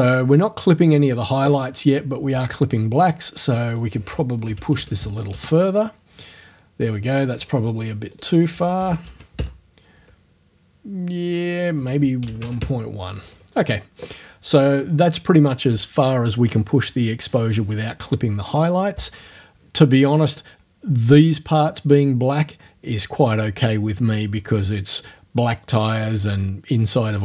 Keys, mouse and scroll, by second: 3.7 right click, 4.5 KP_1, 4.6 KP_Decimal, 4.8 KP_5, 5.3 KP_Enter, 8.2 right click, 8.8 KP_1, 8.9 KP_Decimal, 9.1 KP_2, 9.4 KP_Enter, 11.6 right click, 12.2 KP_1, 12.6 KP_Enter.